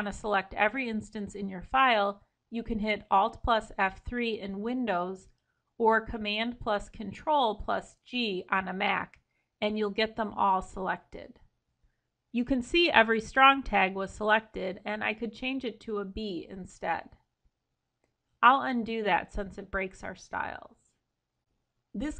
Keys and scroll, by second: 0.3 Escape, 4.3 alt+F3, 18.7 ctrl+z.